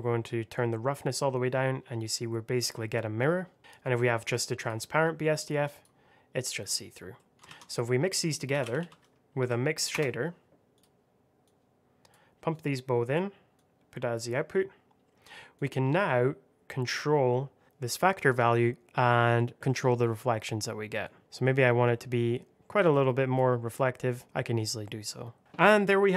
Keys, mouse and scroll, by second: 3.5 middle click, 3.6 click, 7.0 middle click, 7.4 shift+a, 7.5 click, 8.4 m, 8.5 i, 8.7 x, 9.2 Down, 9.8 Return, 10.6 click, 14.8-15.5 scroll up 1, 15.5 click, 24.9 middle click.